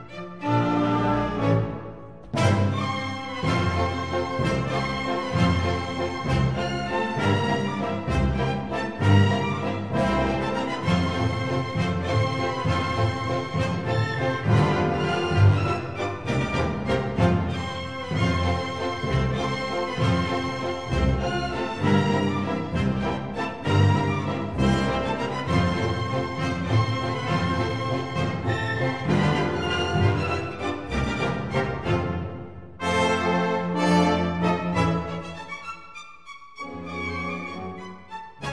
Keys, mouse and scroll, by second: 1.7-4.6 drag, 4.6 middle click, 4.6-7.6 drag, 7.6 g, 11.2 Tab, 11.6 middle click, 12.0 click, 14.4-16.2 drag, 18.5-20.4 drag, 20.6 Tab, 22.8 ctrl+r, 25.6 ctrl+r, 31.4 ctrl+r.